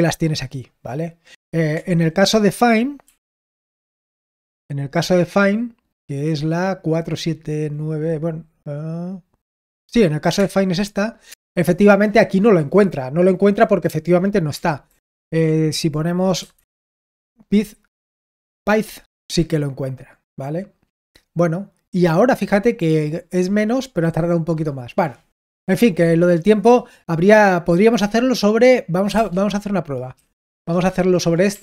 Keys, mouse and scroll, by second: 3.0 ctrl+r, 3.3-4.3 typing, 10.2 Return, 11.2 Return, 14.8 ctrl+p, 15.3-17.1 typing, 28.7-31.6 typing, 30.4 Return.